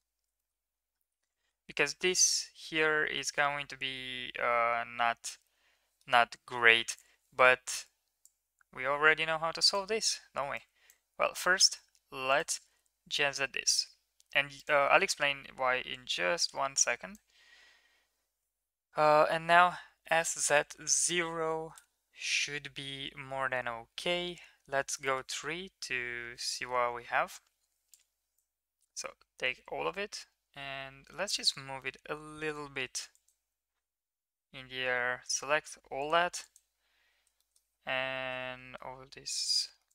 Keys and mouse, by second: 0.3 shift+middle click, 2.3-6.0 middle drag, 6.5 KP_1, 16.1 right click, 23.0 KP_1, 24.2 KP_3, 25.1 shift+middle click, 28.1 click, 28.7 g, 33.2 click, 33.5 g, 36.5 click, 37.4 shift+middle click, 38.0 g.